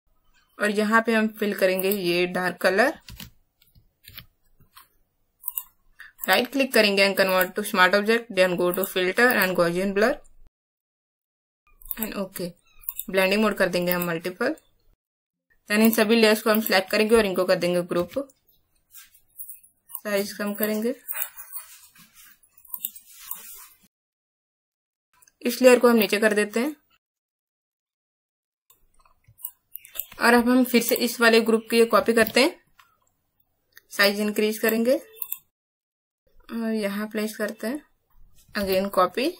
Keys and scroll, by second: 3.0 alt+BackSpace, 4.0 ctrl+alt+d, 15.3 space, 17.9 ctrl+g, 32.1 ctrl+j, 38.1 space, 38.5 ctrl+j.